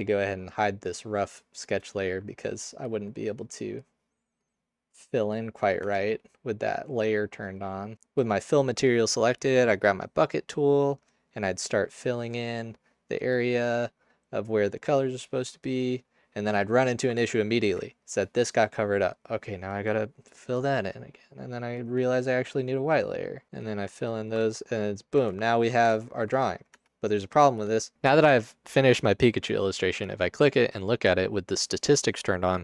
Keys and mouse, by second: 5.8 Tab, 13.8-16.5 middle drag, 17.3 ctrl+alt+click, 26.7 Tab.